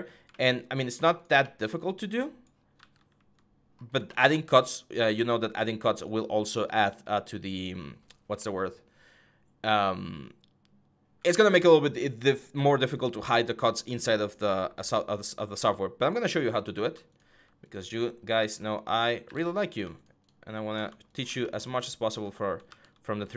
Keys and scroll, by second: 2.5 ctrl+z, 18.1 ctrl+z, 19.0 w, 22.4 ctrl+z.